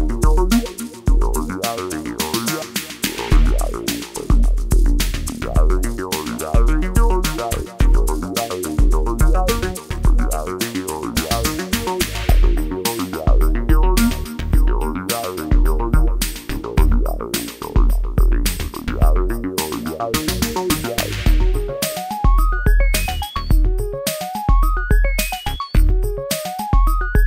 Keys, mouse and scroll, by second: 2.2 click, 4.4-7.2 drag, 7.2 ctrl+z, 7.8-9.8 drag, 9.8-17.3 drag, 17.3-19.2 drag, 19.2-21.7 drag, 23.6 ctrl+Num_Lock, 23.6 click, 24.4 click, 25.0 scroll up 1, 25.4 scroll down 1, 26.8 click.